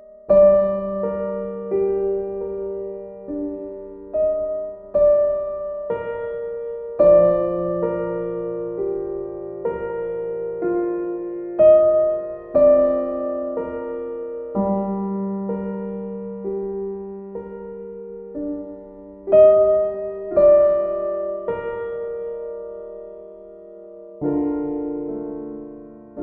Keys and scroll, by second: 5.2 b.